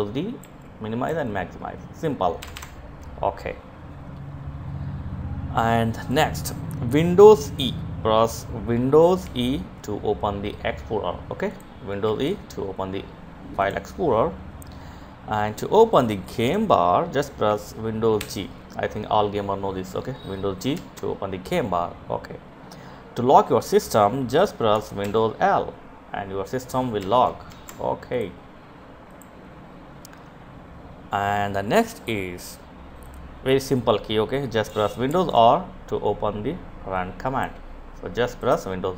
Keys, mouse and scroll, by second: 0.4 d, 1.8 BackSpace, 5.4 click, 8.6 super+e, 10.8 click, 11.4 super+e, 13.0 click, 20.0 Escape, 27.5 Escape, 28.3-29.4 drag, 33.5 click, 34.4 super+r, 36.2-37.5 drag.